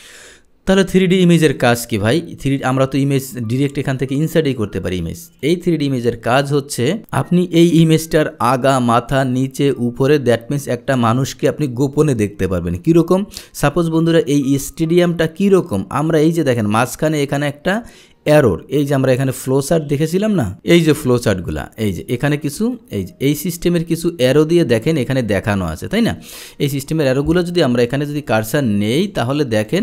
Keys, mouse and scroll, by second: 1.4 click, 2.7 click, 3.7 click, 5.5 click, 19.7 click, 22.0 click, 22.8 click, 24.8 click, 27.3 click, 28.3 Delete, 29.0 click.